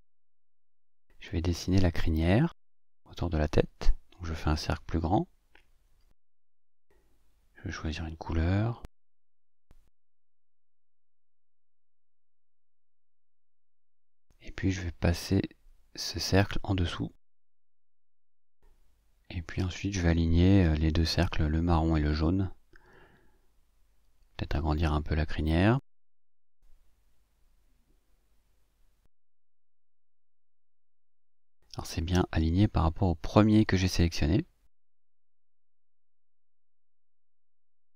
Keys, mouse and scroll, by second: 0.1 ctrl+scroll down 2, 3.9 click, 5.1-7.0 ctrl+shift+drag, 13.9 click, 15.6 click, 16.3-18.1 drag, 19.1 click, 21.6 ctrl+scroll up 2, 22.3-24.2 ctrl+drag, 25.0-26.1 ctrl+shift+drag, 26.7 shift+click, 27.6 ctrl+click, 28.0 shift+click, 28.5 shift+click, 30.0 click, 31.7 ctrl+z, 33.3 click, 37.8 click.